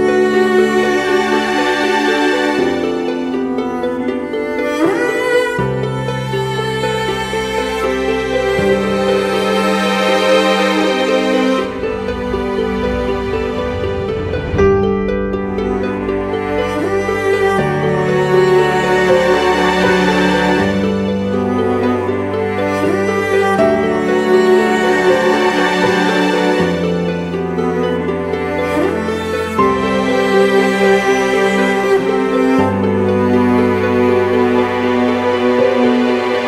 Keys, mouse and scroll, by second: 0.7 Return, 9.8 alt+click, 15.5 right click, 17.3-18.4 typing, 20.6 typing, 21.1 double click, 24.2-24.8 typing, 27.0 double click, 27.4-27.8 typing, 30.5 double click, 34.0 right click, 35.4-36.0 typing.